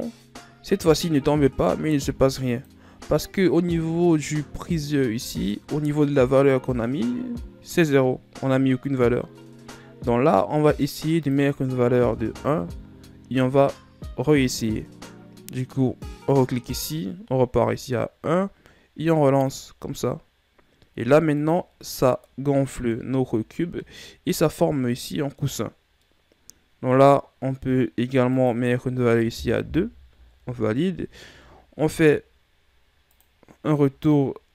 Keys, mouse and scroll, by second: 3.1 click, 5.5-7.1 scroll up 12, 7.1-8.5 scroll up 12, 8.5-9.5 scroll up 5, 9.5-10.2 scroll up 1, 10.2-11.8 scroll down 5, 11.8 click, 16.9 click, 20.1 click, 22.9-23.9 middle drag, 23.9-24.4 shift+scroll up 2, 24.4-29.0 middle drag, 29.0 click, 33.8 click.